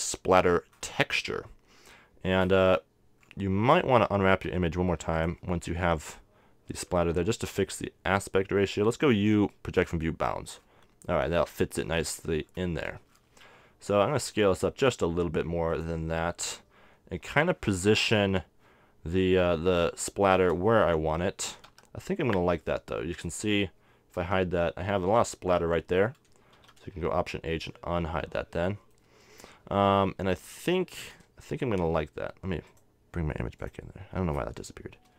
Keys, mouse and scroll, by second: 1.7 middle click, 4.5 u, 8.8 u, 12.3 middle click, 14.1 s, 16.0-17.8 drag, 18.0-19.9 middle drag, 19.6 g, 21.7 z, 23.0-24.3 drag, 24.3 h, 26.8 alt+h, 30.2 middle click, 30.4 a, 31.1 right click, 32.8 click, 34.1 click.